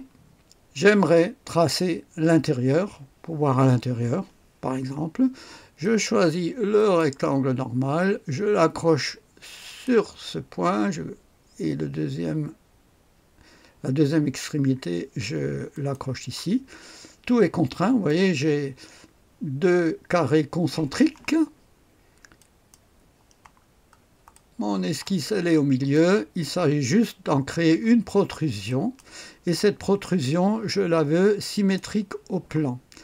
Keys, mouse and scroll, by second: 5.8 click, 6.8 click, 9.6 click, 15.7 click, 22.4 click, 23.6-24.3 scroll down 1, 24.3 click, 25.3-25.9 scroll down 1, 25.9 right click, 26.5 click, 28.7 click, 31.5 click.